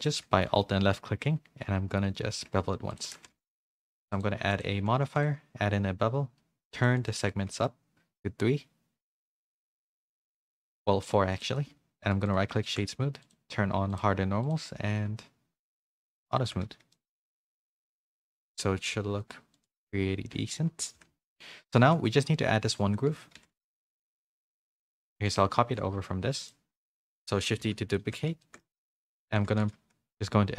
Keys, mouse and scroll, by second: 0.4 middle click, 1.1 ctrl+b, 3.0 Tab, 3.1 a, 3.4 middle click, 3.4 a, 4.6 click, 6.9 click, 7.7-10.7 shift+drag, 11.3 click, 13.2 click, 13.9 click, 16.1 click, 16.9 middle click, 16.9 a, 17.9 middle click, 17.9 a, 18.4 click, 19.5 click, 20.5-23.5 typing, 21.4 Tab, 23.8 middle click, 24.1 shift+middle click, 25.6 a, 25.6 shift+d, 27.6 KP_3, 28.4 shift+middle click, 29.0 Tab, 29.3 z, 29.6 a, 30.1 s.